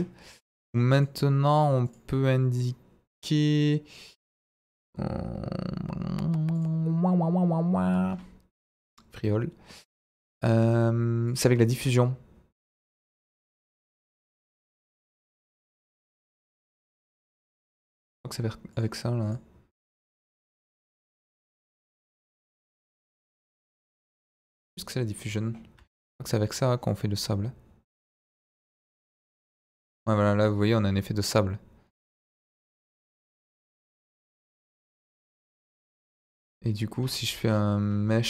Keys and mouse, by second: 0.9 click, 3.3 click, 4.5 click, 6.5 click, 8.9 click, 11.3 click, 16.6 click, 17.4 click, 18.7 click, 19.2 click, 19.8 click, 22.0 click, 23.3-25.8 drag, 26.8-34.5 drag, 35.0 middle drag, 36.1-36.4 middle drag.